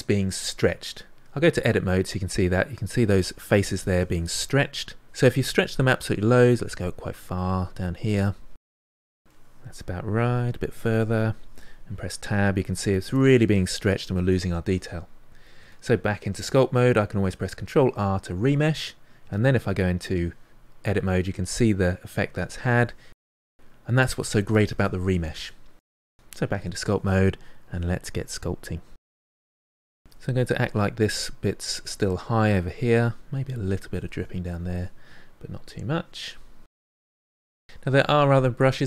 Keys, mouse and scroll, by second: 1.4 Tab, 5.0 Tab, 5.2-7.0 drag, 7.2-8.4 drag, 8.4-9.6 middle drag, 9.6-11.9 drag, 11.9 Tab, 12.5-15.6 middle drag, 15.6 Tab, 17.7 ctrl+r, 19.2 Tab, 20.0-22.5 middle drag, 26.1 Tab, 26.2 middle click, 26.4 click, 27.1 middle click, 27.3 click, 27.6 middle click, 27.8 click, 28.3 middle click, 28.4 click, 29.4 middle click, 30.0-31.0 drag, 31.0 middle click, 31.2-32.6 drag, 32.6 middle click, 33.4-35.8 drag, 35.8 middle click, 36.1 click, 36.7 middle click, 37.0 click, 37.5 middle click, 37.8-38.8 drag.